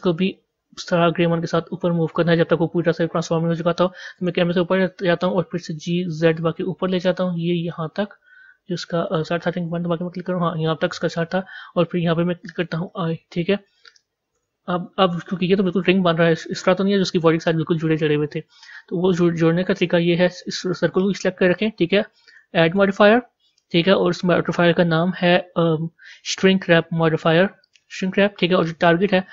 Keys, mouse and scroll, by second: 2.5 scroll down 1, 4.0 KP_0, 5.7 g, 9.6 KP_1, 12.8 i, 14.3 KP_0, 17.1-27.7 drag, 29.2 click.